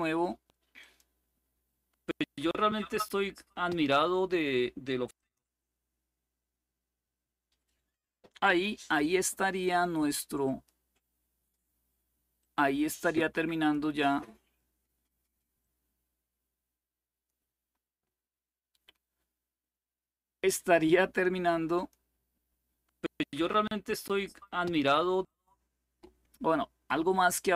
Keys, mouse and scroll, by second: 0.5 click, 4.8 click, 10.1 click, 12.1-14.2 drag, 15.3-17.6 drag, 21.4 click, 24.9 click.